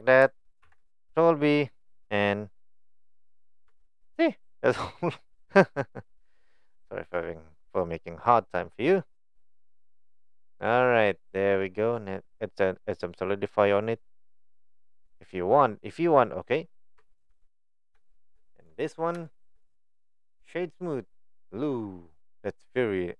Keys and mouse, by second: 0.6 ctrl+b, 3.7 Tab, 3.9 click, 4.6-5.6 middle drag, 6.0 click, 6.5-8.3 right drag, 9.6-11.4 middle drag, 13.8-15.5 drag, 16.3 right click, 17.0 Tab, 17.3 Tab, 17.5 click, 18.1 shift+middle click, 18.6 click, 19.2 shift+middle drag, 19.8 right click.